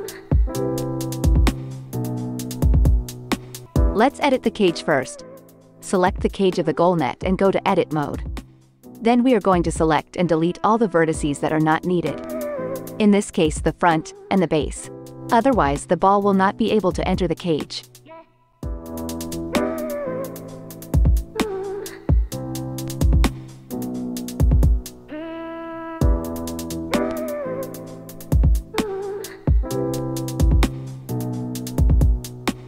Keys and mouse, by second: 3.9 click, 4.5 Tab, 7.2 c, 9.6 c, 11.2-29.2 drag, 11.5 c, 17.0 c, 19.4 c, 20.1 c, 23.4 c, 25.0 c, 26.6 c, 27.3 c, 30.1 x, 30.6 Tab, 31.9 KP_Divide.